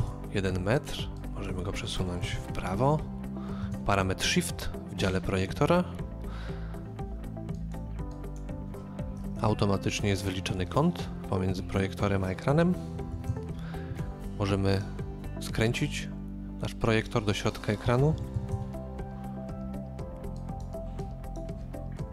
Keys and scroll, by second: 2.2 BackSpace, 3.6 Return, 5.0 typing, 9.2 KP_0, 9.4 Return, 12.9-13.6 typing, 15.0 typing, 18.3 KP_5, 18.5 Return.